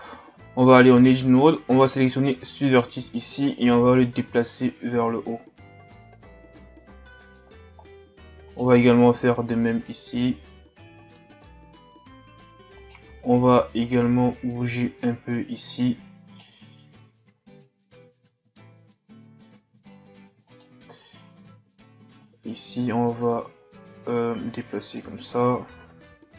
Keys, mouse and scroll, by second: 0.4 Tab, 1.2-1.9 shift+scroll up 4, 2.7 right click, 3.8-6.8 drag, 7.6-8.4 shift+scroll up 4, 8.5 right click, 9.9 click, 11.0 scroll up 2, 11.1 right click, 11.2 click, 11.4 Tab, 11.5 a, 11.6 scroll up 2, 11.9-12.3 scroll down 1, 12.5 scroll up 1, 12.6 Tab, 12.8 right click, 13.6-16.5 drag, 18.0-18.4 shift+scroll up 2, 18.9 Tab, 20.5 right click, 21.1 Tab, 22.2-25.3 drag, 25.8 KP_3.